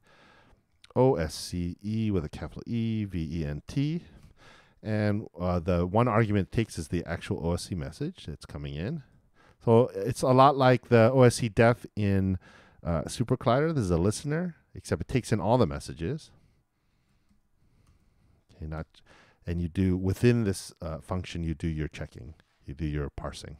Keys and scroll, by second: 1.4-2.3 typing, 3.8-4.7 typing, 7.8 shift+o, 8.9-10.6 typing.